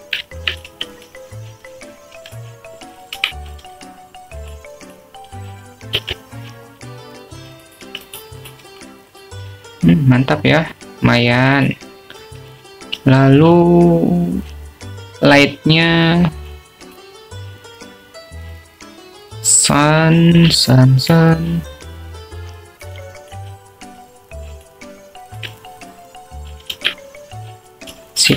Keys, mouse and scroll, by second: 0.7 alt+middle drag, 1.7 s, 2.5 click, 2.8 Tab, 4.3 2, 5.3 e, 7.0 click, 8.1 ctrl+b, 10.0 Tab, 10.8 `, 13.8 click, 14.7 shift+a, 22.8-23.3 alt+middle drag, 24.0-25.0 drag, 25.2 alt+middle drag, 26.2-26.8 drag, 27.1-27.5 alt+middle drag, 28.1-28.3 drag.